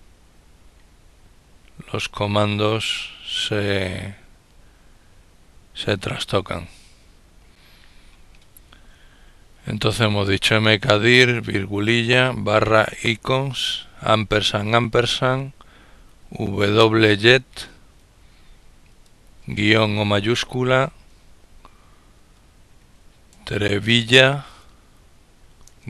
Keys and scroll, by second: 16.1 typing, 22.7-25.8 typing.